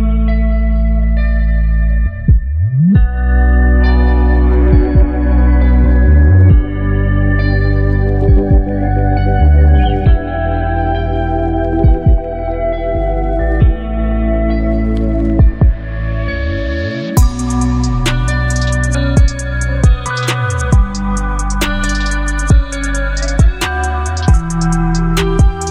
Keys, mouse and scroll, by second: 3.3-4.8 shift+drag, 6.3-10.7 alt+drag, 11.3-12.3 alt+scroll up 2, 12.5 space, 12.7-13.6 click, 13.0 space, 16.8 ctrl+0, 18.5 click, 19.8 ctrl+t, 22.0-25.7 shift+drag, 25.5-25.7 shift+drag.